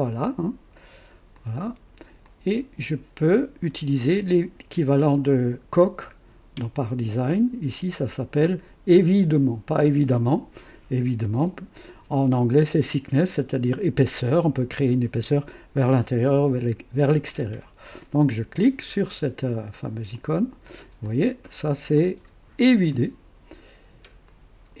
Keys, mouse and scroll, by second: 0.2 ctrl+click, 1.3 ctrl+click, 2.2 ctrl+click, 20.1 click, 21.0-22.0 drag, 22.2 scroll up 2, 22.9 right click, 24.2 click.